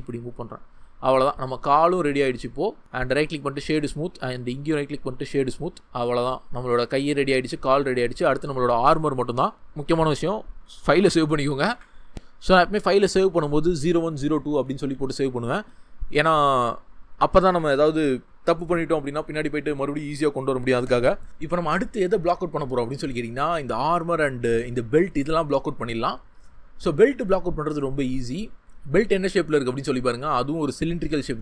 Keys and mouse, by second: 2.9-3.4 right drag, 4.5-5.2 right drag, 8.0 click, 11.7 ctrl+shift+s, 26.9 middle click.